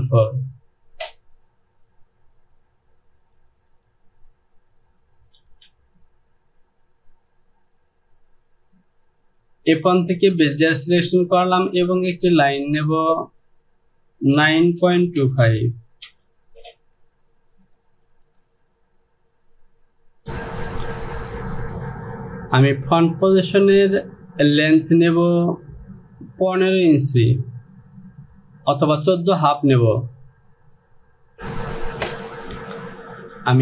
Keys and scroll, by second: 5.6 Home, 15.2 KP_2, 15.5 KP_5, 16.1 Return, 20.2 Home.